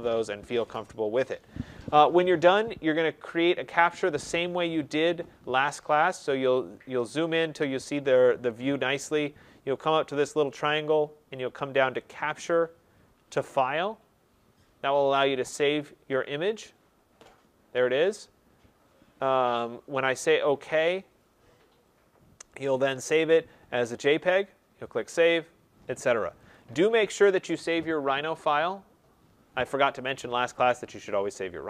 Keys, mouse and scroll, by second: 3.1-3.9 scroll, 3.9 middle click, 4.6 middle click, 4.7 middle click, 5.3 middle click, 5.4 middle click, 6.0 middle click, 7.0 middle click, 10.5 scroll, 10.6 click, 15.7 click, 20.8 click, 26.4 click.